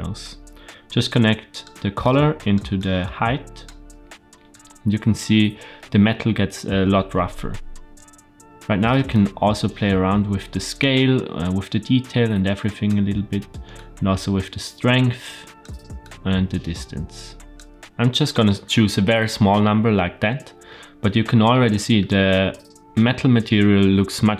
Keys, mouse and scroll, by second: 1.9 click, 2.7-3.6 drag, 9.0-10.7 drag, 11.4-12.8 drag, 13.7-15.6 drag, 15.9-17.5 drag, 17.7 shift+click, 20.9-21.5 scroll up 1, 21.5-23.5 shift+middle drag.